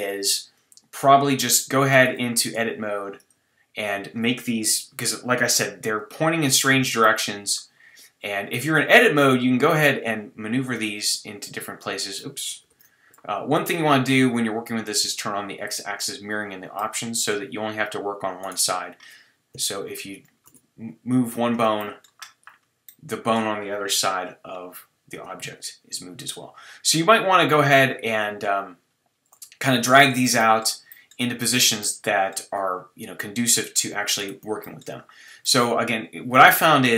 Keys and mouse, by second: 0.9-5.5 middle drag, 2.4 Tab, 5.5 KP_3, 6.4 middle click, 9.4 click, 9.7 g, 12.7 z, 16.8-18.4 drag, 18.4-19.5 middle drag, 19.5 KP_3, 20.5 g, 23.9 KP_1, 25.1 g, 29.8 middle click, 30.4 middle click, 30.9 middle click, 34.2 middle click, 35.4-36.9 middle drag.